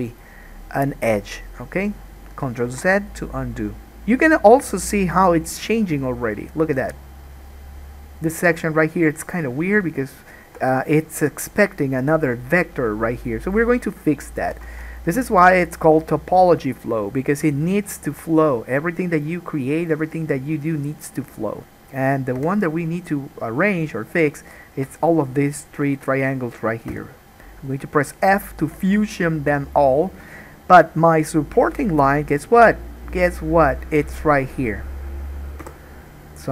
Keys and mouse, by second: 2.8 ctrl+z, 14.8 alt+a, 22.6 3, 22.6 click, 22.7-23.8 middle drag, 23.8-25.0 shift+drag, 25.0 middle click, 27.1 f, 28.9 alt+a, 35.8 k.